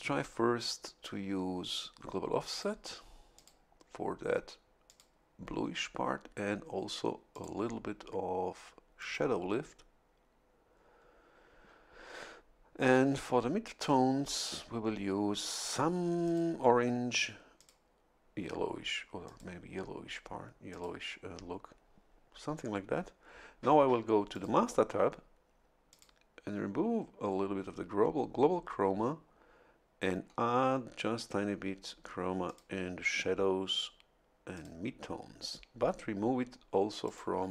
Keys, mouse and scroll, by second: 2.5 click, 3.3 click, 4.8 click, 7.3 click, 9.0 click, 14.2 click, 16.2 click, 17.5 click, 19.2 click, 20.7 click, 24.3 click, 25.9 click, 32.4 click, 34.5 click, 37.0 click.